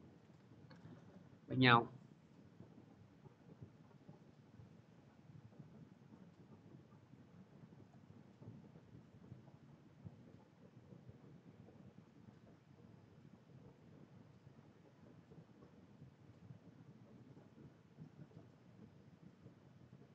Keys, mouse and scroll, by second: 0.0 click, 0.5 p, 1.1 middle click, 3.6-5.1 drag, 7.7 click, 8.6 c, 9.8-12.8 drag.